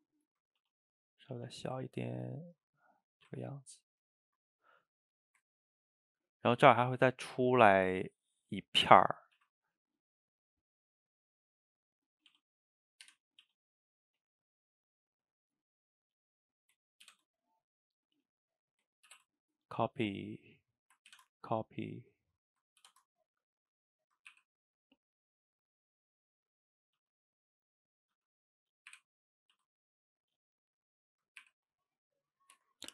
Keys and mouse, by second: 0.0-0.6 middle drag, 0.6 s, 1.4 a, 1.5 a, 1.6-3.2 ctrl+middle drag, 3.2 shift+right click, 3.4-5.0 ctrl+middle drag, 5.0 click, 5.3 shift+right click, 5.6-9.2 ctrl+middle drag, 9.2 shift+right click, 9.4 shift+a, 12.3 s, 13.4 s, 14.4-16.0 middle drag, 16.0 drag, 17.1 ctrl+c, 18.0 click, 19.1 ctrl+v, 20.0 drag, 21.1 ctrl+c, 21.9 click, 22.9 ctrl+v, 23.5-24.3 middle drag, 24.3 r, 25.8-27.0 middle drag, 27.0 s, 27.8-28.2 middle drag, 28.2 g, 29.0 r, 29.6 s, 30.3-31.4 middle drag, 31.4 r, 32.6 Tab.